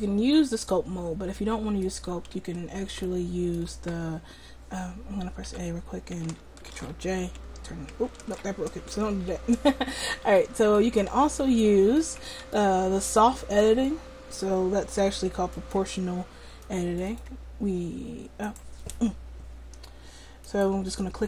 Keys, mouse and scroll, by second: 2.4 Tab, 5.6 a, 6.8 alt+j, 8.3 ctrl+z, 8.9 Tab, 9.5 Tab, 15.6-18.5 drag, 18.5-20.5 middle drag, 20.5-21.2 right drag.